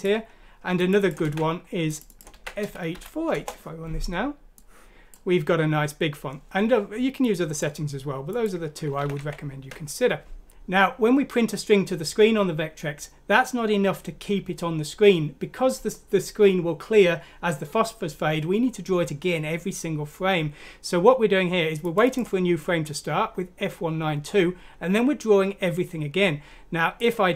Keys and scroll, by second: 1.2 ctrl+c, 2.3 ctrl+v, 2.9 ctrl+F6, 3.4 ctrl+Return, 9.0 ctrl+z, 9.1 ctrl+z.